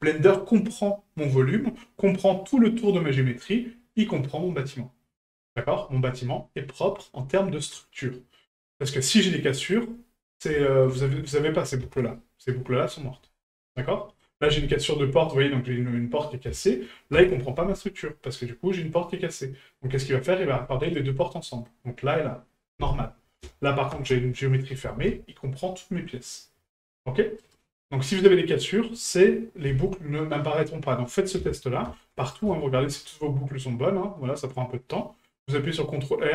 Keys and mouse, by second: 6.0-7.1 middle drag, 8.6 middle drag, 10.7 shift+middle click, 13.9-14.2 middle drag, 14.7 middle drag, 21.2-21.7 middle drag, 28.8-29.2 middle drag.